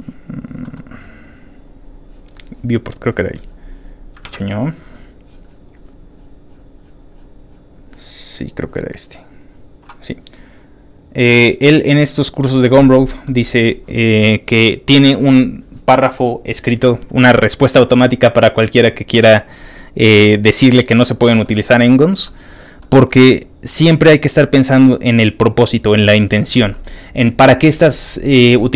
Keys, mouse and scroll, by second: 0.6 middle click, 1.7 middle click, 1.7 scroll down 1, 1.8 middle click, 2.9 click, 3.4 middle click, 3.4-4.1 scroll down 2, 4.2 ctrl+w, 5.5-8.4 scroll down 17, 8.6 middle click, 9.0 middle click, 9.4 middle click, 9.6-10.1 scroll down 1, 10.1 scroll up 2, 10.9 click, 11.8 click, 12.4 middle click, 13.2 middle click, 21.4 middle click, 21.4 scroll down 1, 22.3 middle click, 23.4 scroll down 3, 23.7 middle click, 24.6 ctrl+click, 25.4 scroll up 2.